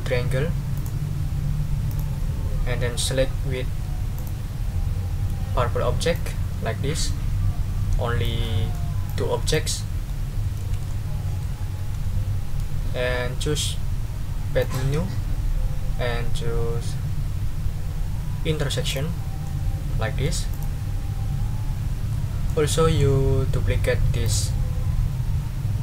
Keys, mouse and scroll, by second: 0.7 right click, 1.9 click, 4.1 shift+click, 6.1-8.9 drag, 9.1 click, 9.8-10.2 scroll up 1, 10.6 ctrl+z, 10.9-11.6 ctrl+scroll up 1, 11.8 ctrl+z, 14.6 click, 18.9 click, 19.4 middle click, 20.5 click, 22.1 click, 22.5 middle click, 24.2 click.